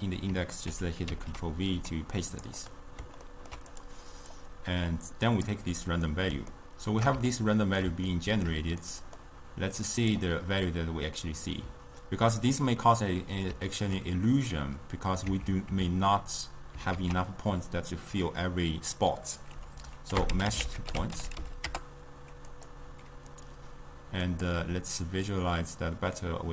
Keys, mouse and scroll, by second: 1.1 ctrl+v, 1.8 g, 2.8 middle click, 3.8-4.5 drag, 6.1-9.8 middle drag, 9.8 click, 15.4 Tab, 15.8 Tab, 17.0 ctrl+a, 24.4 click, 25.3-26.5 drag.